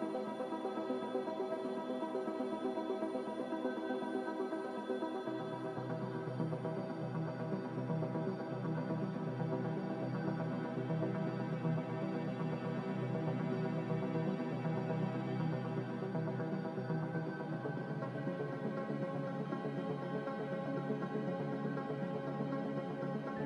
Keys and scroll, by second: 8.1 z, 9.3 m, 10.6 z, 16.5 m.